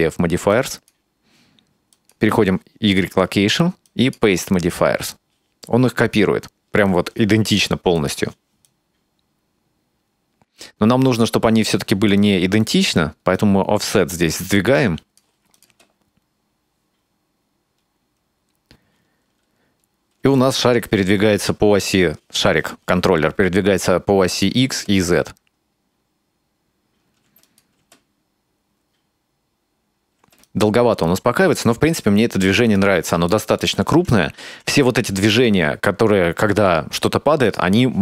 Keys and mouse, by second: 0.6 click, 1.9 click, 3.9 click, 8.0 click, 8.7-12.1 drag, 13.4-15.2 drag, 15.6 click, 15.7 space, 20.2 space, 24.3 click, 24.7 space, 27.3 space, 27.5 click, 27.8 space, 30.2 space, 30.5-32.8 drag, 33.3 shift+middle click, 34.5 n, 37.5 click.